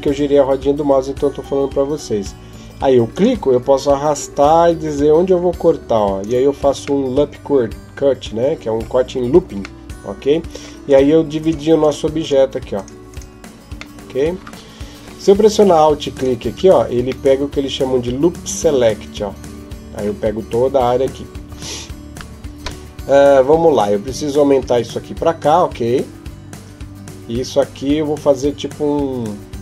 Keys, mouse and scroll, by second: 6.8 middle click, 10.7 right click, 11.2-13.0 right click, 13.8 middle click, 16.0 alt+right click, 17.1 middle click, 21.3 KP_7.